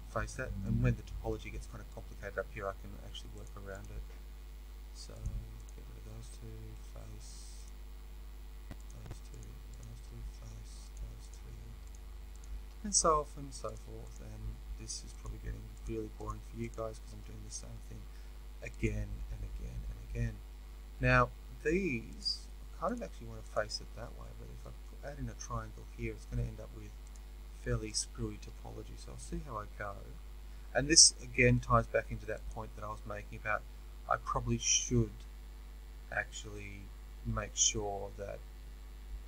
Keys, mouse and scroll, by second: 0.0 f, 0.5-3.4 middle drag, 3.4 shift+click, 6.8 f, 7.5 shift+click, 10.1 f, 10.9 shift+click, 13.0 f, 13.6 shift+click, 17.5 f, 18.8 click, 22.1 shift+click, 24.0-27.0 middle drag, 27.0 shift+click, 29.7 f, 31.1-32.4 shift+middle drag, 32.4 click, 34.2-39.2 shift+middle drag.